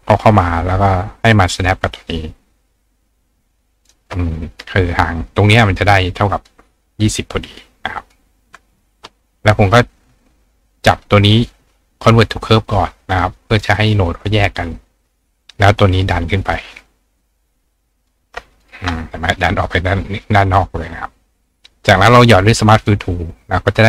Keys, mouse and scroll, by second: 3.7-12.1 shift+right drag, 6.4 click, 7.6-8.1 drag, 8.7 click, 10.8 click, 13.1 click, 13.6 click, 15.2-15.7 drag, 16.6-18.1 ctrl+drag, 18.6-21.5 drag, 21.9 click, 22.8 click.